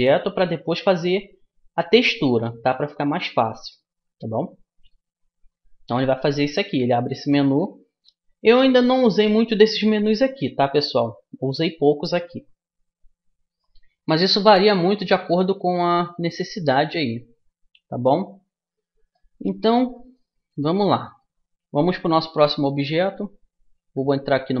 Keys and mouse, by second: 19.1-21.0 middle drag, 22.5 a, 24.0 Tab.